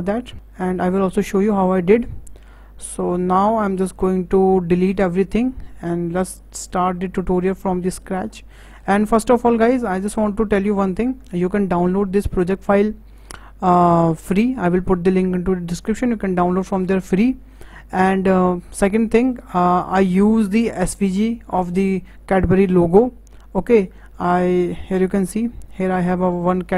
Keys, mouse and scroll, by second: 0.3 scroll down 7, 0.4-2.2 scroll up 5, 2.2-2.8 scroll down 7, 2.8 shift+middle click, 3.1 scroll down 2, 3.4-4.9 shift+middle drag, 4.9 click, 5.5-6.2 scroll up 3, 6.2-6.5 scroll down 1, 6.5-7.5 middle drag, 7.5-8.3 scroll up 4, 8.3-8.7 shift+middle drag, 8.7-9.1 scroll up 5, 9.2 shift+middle click, 9.8-10.3 scroll up 4, 10.3-13.8 shift+middle drag.